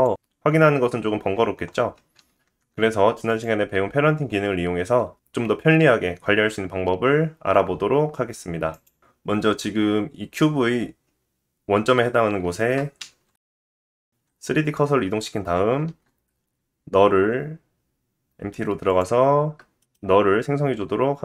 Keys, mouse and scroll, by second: 3.3 ctrl+z, 3.6 ctrl+z, 4.4 click, 9.6 middle click, 13.0 shift+s, 13.3 shift+s, 14.2-15.4 middle drag, 15.4-15.9 scroll down 2, 15.9 shift+a, 19.8 middle click.